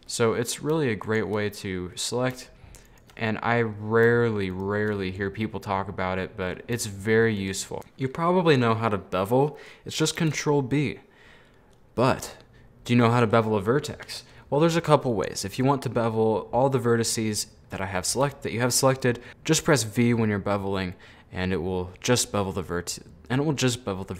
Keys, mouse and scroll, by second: 0.4 scroll down 2, 0.5 middle click, 1.2 ctrl+right click, 1.5 middle click, 1.9 scroll down 1, 2.0 middle click, 2.9 ctrl+right click, 3.3-4.5 middle drag, 4.5 right click, 5.0-7.4 middle drag, 7.4 ctrl+right click, 8.4-10.4 middle drag, 10.4 ctrl+b.